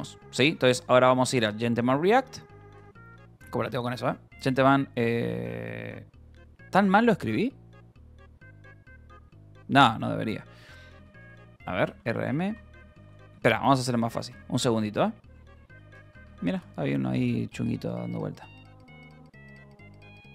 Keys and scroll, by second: 0.0-1.6 typing, 2.7 BackSpace, 4.2 Return, 9.8-16.6 typing, 11.2 Return, 17.0 Return, 18.3 w, 19.7 Return, 20.1-20.3 typing.